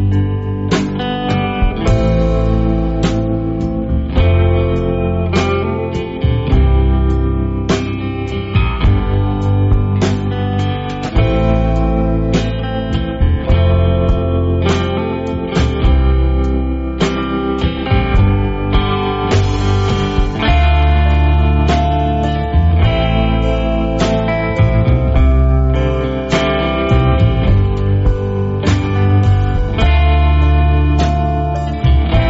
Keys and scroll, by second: 13.6-14.3 typing.